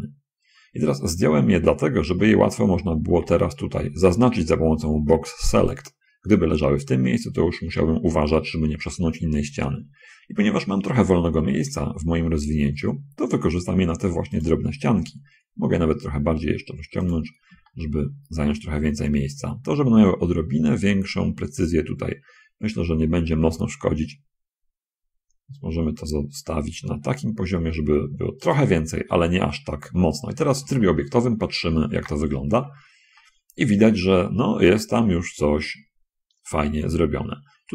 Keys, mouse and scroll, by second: 3.2 a, 4.0 b, 4.6-6.1 drag, 12.0 g, 14.6 click, 16.0 s, 17.4 click, 18.0 shift+click, 18.8 shift+click, 20.5-21.6 drag, 22.4 middle click, 23.7 s, 29.4 middle click, 30.1 Tab, 31.0 shift+click, 32.2 shift+space, 32.8 shift+middle click, 33.1-34.1 drag, 34.4 click, 34.6 middle click, 35.3 middle click, 36.6 middle click, 37.2-37.7 middle drag.